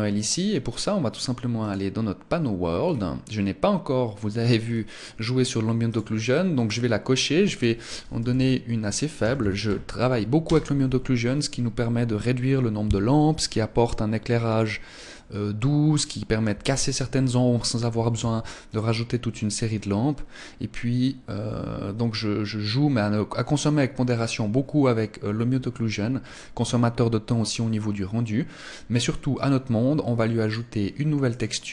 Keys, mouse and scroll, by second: 1.5 click, 2.7-3.1 scroll down 3, 4.6 scroll down 1, 5.9 click, 5.9 scroll down 1, 6.5 click, 18.1 ctrl+s, 23.6 scroll up 1, 25.3-25.7 scroll up 5, 30.4 click, 31.3 click.